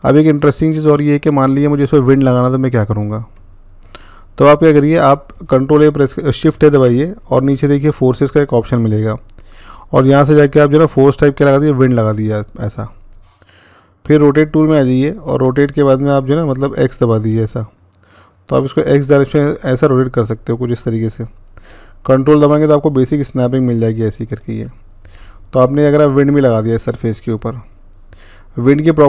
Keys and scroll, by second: 6.3 a, 15.1 r, 17.1-19.9 x.